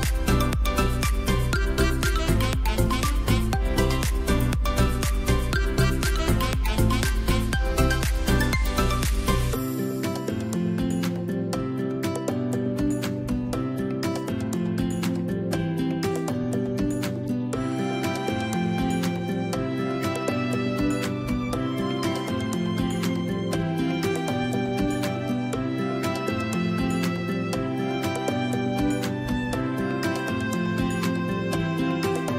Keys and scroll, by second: 0.3 ctrl+z, 5.0 ctrl+j, 6.7 space, 7.1 v, 8.5 a, 15.9 v, 17.2 space, 19.7 ctrl+g, 20.4 space, 24.0 r, 27.4 3, 28.3 /, 28.7 8, 30.9 ctrl+d.